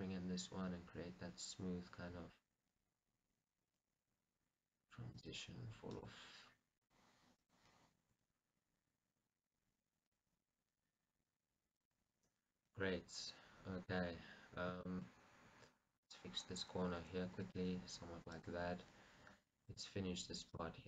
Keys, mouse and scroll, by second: 0.1 g, 6.1 click, 6.9 click, 7.5 click, 8.3 g, 12.1 click, 14.7 scroll up 2, 15.0 shift+middle click, 15.4 scroll, 16.2 click, 17.1 g, 18.6 click, 18.9-19.5 scroll, 19.5-20.1 scroll down 1, 20.1 click.